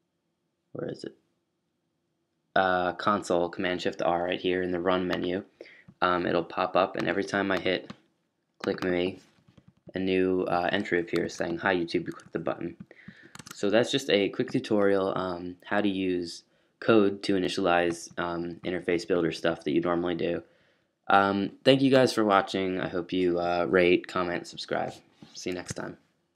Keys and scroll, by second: 11.2 super+q, 13.3 super+w, 22.6 fn+Up.